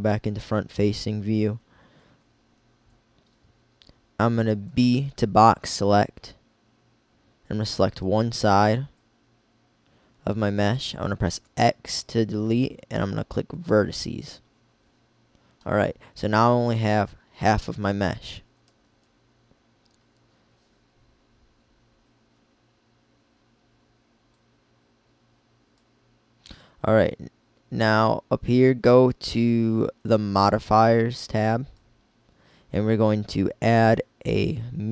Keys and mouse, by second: 4.7 b, 10.6 x, 18.8 KP_1, 24.5-26.3 drag, 31.5-34.5 drag.